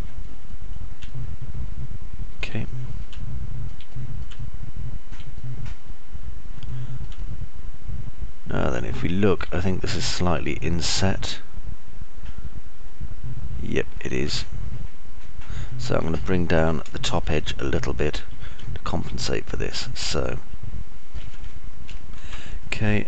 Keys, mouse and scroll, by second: 2.5 alt+right click, 2.8 alt+middle click, 4.1 middle click, 4.6 alt+middle click, 5.3 middle click, 6.0 alt+middle click, 6.6 middle click, 8.5-10.6 alt+middle drag, 11.3 middle click, 11.6 alt+middle click, 13.8 alt+click, 13.8 alt+middle click, 13.8 alt+right click, 18.1 middle click, 19.3 alt+click, 19.3 alt+middle click, 19.3 alt+right click, 20.0-22.5 alt+drag, 20.0-22.5 alt+middle drag, 20.0-22.5 alt+right drag.